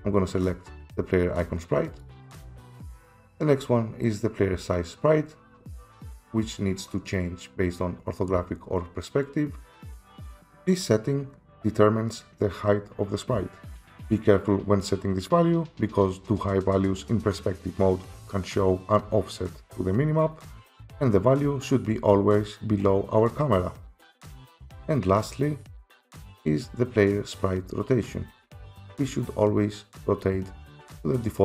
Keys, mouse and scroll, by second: 2.0 click, 2.4 click, 10.4 F7, 13.9 F7, 20.7 F7, 30.8 F7.